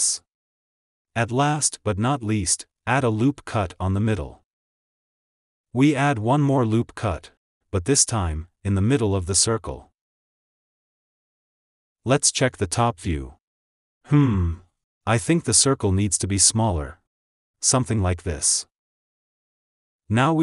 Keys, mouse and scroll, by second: 3.3 ctrl+r, 6.8 middle click, 7.7 ctrl+r, 11.8 Tab, 12.2 click, 13.3 shift+click, 15.3 s, 19.2 g.